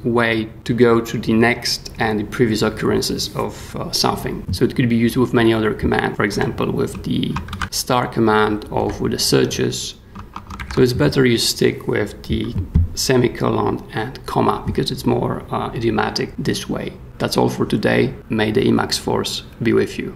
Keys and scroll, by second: 4.4 j, 6.3 k, 6.9 shift+k, 7.5 shift+w, 8.8 /, 10.6 ctrl+g.